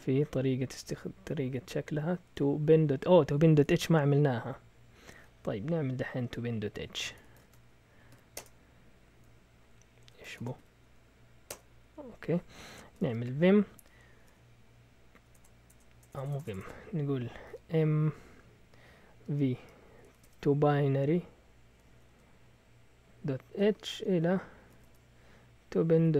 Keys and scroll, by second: 3.6 Return, 7.0 Escape, 7.1-8.1 typing, 8.4 Return, 10.0 Escape, 10.1-10.8 typing, 11.5 Return, 12.6-18.0 typing, 19.2-20.5 typing, 21.6-26.1 typing.